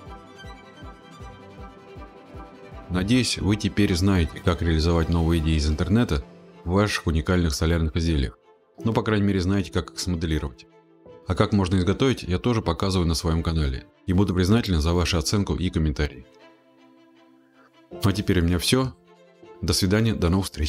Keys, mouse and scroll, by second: 0.1 scroll, 0.4 click, 3.0 scroll, 4.4 click, 4.8 click, 13.6-14.5 scroll, 15.3-16.5 scroll, 16.7-17.5 scroll, 17.9-18.7 scroll, 19.3-19.7 scroll, 20.1-20.6 scroll.